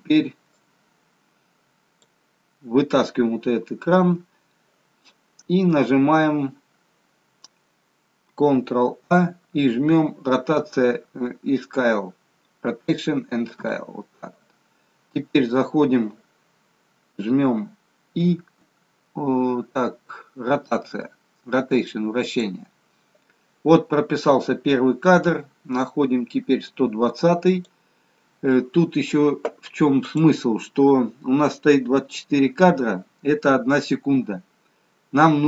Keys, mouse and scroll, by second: 0.9 click, 8.8 ctrl+a, 18.5 i, 25.2 click, 30.0 click.